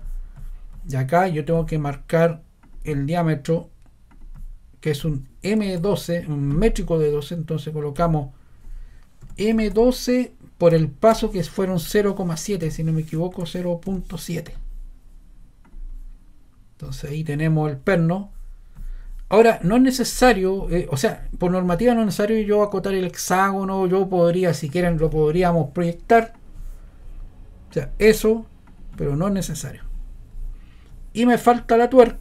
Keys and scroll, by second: 8.9-14.4 typing.